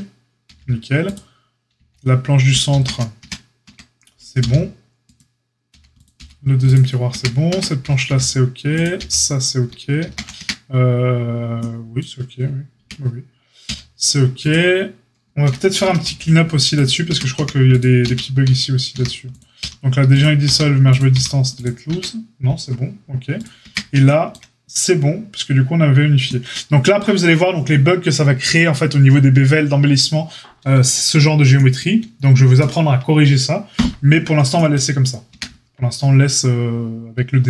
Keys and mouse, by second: 0.4 h, 1.1 click, 1.1 middle click, 1.7 h, 2.7 ctrl+z, 3.2 Tab, 3.6 Tab, 4.4 g, 5.7 middle click, 5.7 h, 6.0 click, 6.1-16.8 middle drag, 6.1 h, 7.1 Tab, 7.5 Tab, 8.0 h, 9.0 h, 10.0 ctrl+z, 10.3 Tab, 12.7 Tab, 13.6 h, 16.0 h, 16.8 click, 17.0 Tab, 17.0-37.4 middle drag, 17.3-21.1 typing, 21.9 Tab, 23.6 Tab, 35.3 Tab.